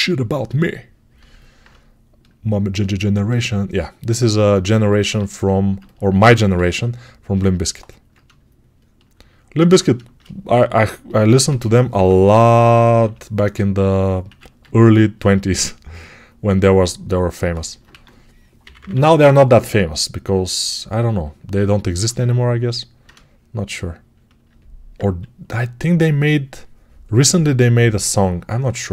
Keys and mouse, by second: 6.2-28.9 right drag, 6.4 x, 11.3 g, 11.8 ], 12.0 ], 14.1 1, 17.7 1, 18.5 [, 18.6 [, 25.8 2.